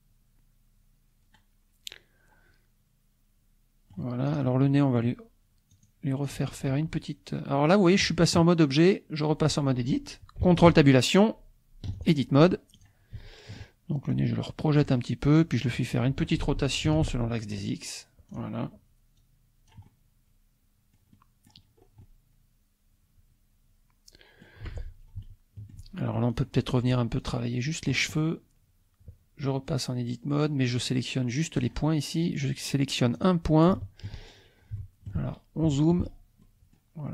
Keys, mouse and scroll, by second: 4.4 click, 4.6 click, 5.7 click, 6.3 click, 7.6 click, 10.7 ctrl+Tab, 12.0 ctrl+click, 12.8 click, 13.2 shift+click, 14.1-15.9 drag, 16.9 r, 17.4 x, 18.3 click, 19.2-21.7 drag, 22.0-24.7 drag, 25.2 shift+click, 26.3 click, 27.2 click, 31.7 click, 33.3 click, 33.8 shift+click, 34.8 shift+click, 35.7 shift+click, 36.4 shift+click.